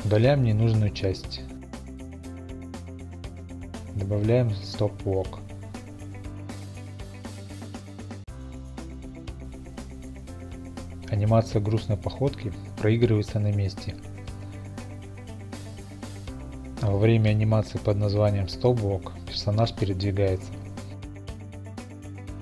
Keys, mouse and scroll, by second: 1.4 click, 2.3 click, 2.7 y, 3.5 click, 3.8 x, 4.0 click, 6.2 click, 8.9 click, 11.1 click, 11.8 shift+click, 12.6 g, 13.4 click, 18.3 click, 20.4 click.